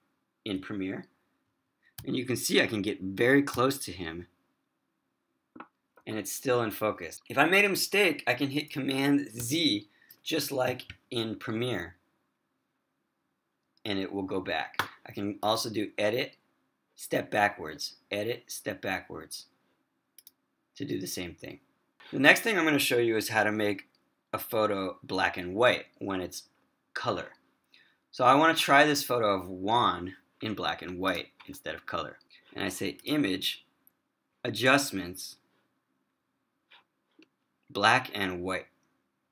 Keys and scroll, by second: 0.8 super+=, 2.1 super+=, 3.7 super+=, 6.2 super+-, 6.6 super+-, 9.5 super+z.